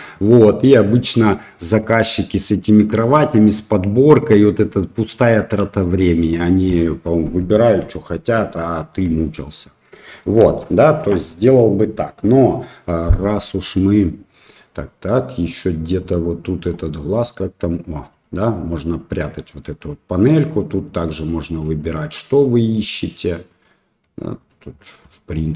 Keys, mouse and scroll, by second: 0.2-0.6 middle drag, 1.8-2.1 middle drag, 7.9-8.3 shift+middle drag, 8.5-8.9 middle drag, 10.4 Delete, 10.8-11.6 middle drag, 15.9 click, 17.2 click, 18.1 click, 18.6 click, 19.4 click, 20.7-21.8 drag.